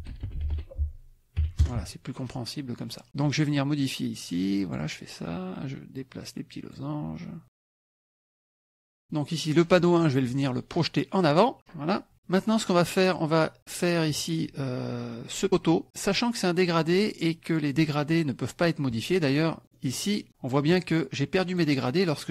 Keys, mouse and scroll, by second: 0.0-1.4 typing, 1.6 KP_Enter, 3.8-4.9 drag, 6.0 click, 7.9 click, 8.3 middle click, 9.0 click, 11.2 click, 11.9 middle click, 14.1 click, 19.6 click, 20.3 middle click, 21.5 click.